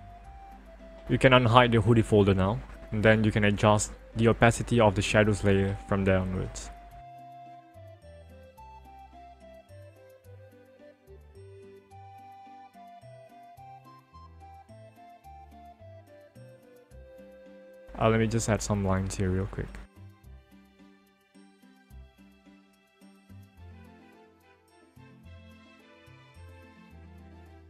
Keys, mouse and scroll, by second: 0.3 click, 4.0 click, 19.0 click, 21.8 click, 23.5 ctrl+click, 25.4 ctrl+alt+z, 26.7 ctrl+click.